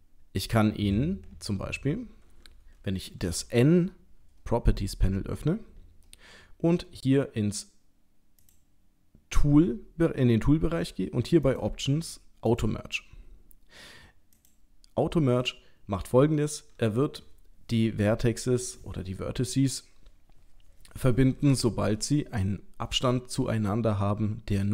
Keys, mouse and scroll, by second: 3.3 n, 8.4 click, 11.5 click, 14.3 click.